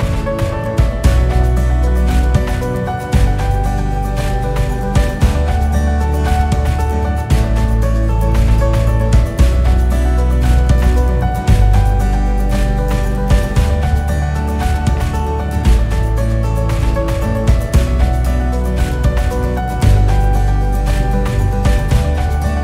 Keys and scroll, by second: 0.5 ctrl+-.